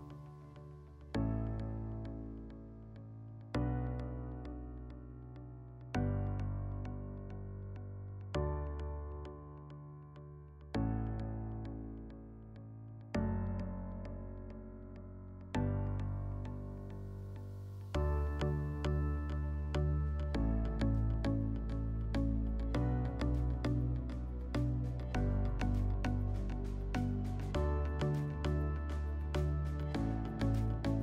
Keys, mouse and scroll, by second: 1.1 ctrl+click, 1.3 ctrl+click, 2.1 ctrl+click, 2.2 ctrl+click, 4.1 alt+middle click, 7.0 ctrl+click, 7.2 ctrl+click, 8.2 ctrl+click, 11.4 alt+middle click, 12.4 alt+middle click, 15.6 click, 17.5 click, 19.4 right click, 20.0 right click, 21.0 click, 25.8 click, 26.7 click, 27.9 click, 29.0 click, 30.8 F4.